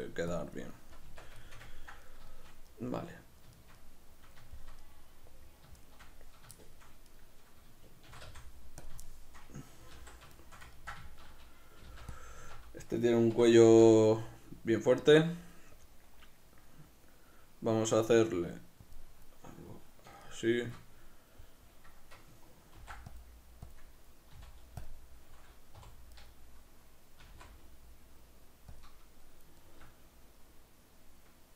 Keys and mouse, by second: 0.3 click, 0.7-7.1 middle drag, 1.0 b, 1.1 Tab, 7.1 right click, 8.0 shift+d, 8.9 click, 9.0-12.2 shift+middle drag, 10.0 alt+q, 11.8 g, 12.2 click, 12.4 Tab, 19.0 click, 20.2-23.8 shift+middle drag, 22.8 ctrl+r, 23.8 click, 24.4 z, 25.8 3, 26.2-27.2 right drag, 27.2 s, 28.8 click, 29.6-31.5 shift+middle drag.